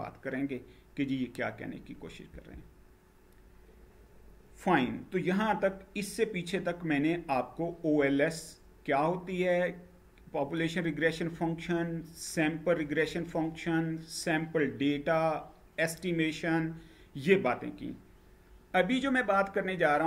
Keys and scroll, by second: 1.9 Right.